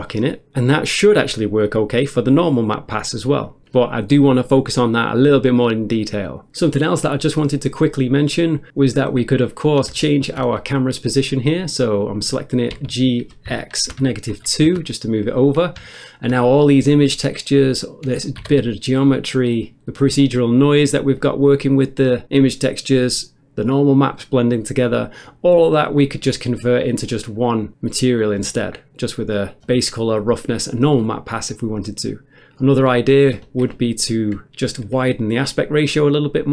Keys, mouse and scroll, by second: 0.2 middle click, 0.5 middle click, 1.0 ctrl+shift+click, 1.9 middle click, 3.5 click, 3.9 middle click, 7.2 middle click, 8.0 click, 9.5-9.9 scroll up 1, 10.0 shift+middle click, 12.7-14.3 typing, 14.7 Return, 15.9 shift+middle click, 16.4-17.0 scroll up 1, 18.1 click, 18.4 r, 18.5 r, 19.0 right click, 32.6 click.